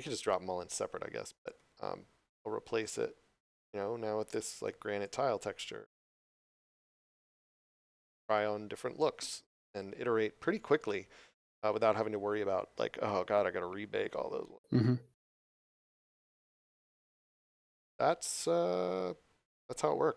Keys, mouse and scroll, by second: 1.5 click, 5.0 click, 16.4 click.